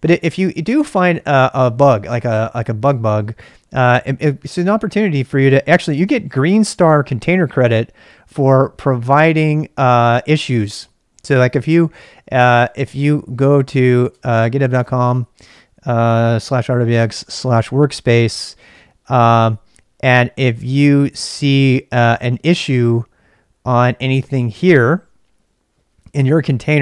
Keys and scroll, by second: 0.0-1.6 typing, 6.7 typing, 9.2-14.4 typing, 19.5 typing.